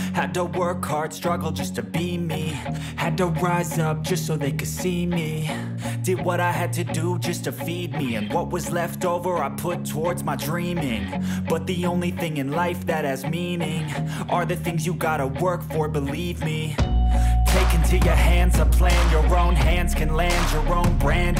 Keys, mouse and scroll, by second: 3.6 click, 4.0 click, 6.2 click, 7.6 scroll, 8.7 scroll, 9.8 click, 10.8 click, 12.5 click, 13.9 click, 17.4 click, 19.2 click, 20.4 click.